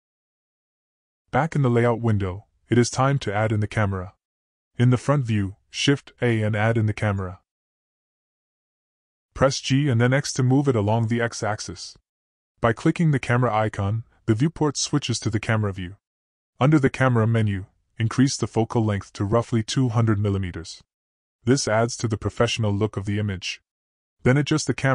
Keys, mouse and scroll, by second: 2.1 click, 2.9 click, 5.5 click, 6.9 shift+a, 8.1-9.5 middle drag, 9.1 typing, 10.6 g, 13.5 middle click, 17.2-21.1 drag, 23.1 g.